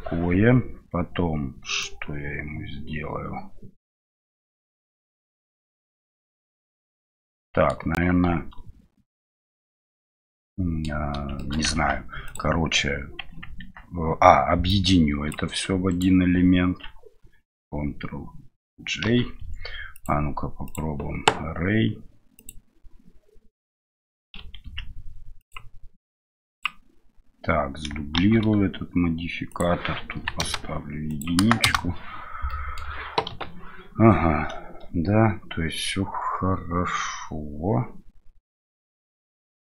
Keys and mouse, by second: 1.8-7.7 middle drag, 10.3-10.9 middle drag, 11.4 shift+middle click, 11.7 Tab, 12.2-13.4 drag, 14.7-15.3 drag, 15.9 shift+right click, 19.0 ctrl+j, 19.9-20.7 drag, 22.3 click, 24.6 ctrl+z, 25.4 click, 26.5 click, 28.1 shift+d, 29.5-30.6 drag, 31.1 click, 32.5-32.8 middle drag, 33.3 KP_7.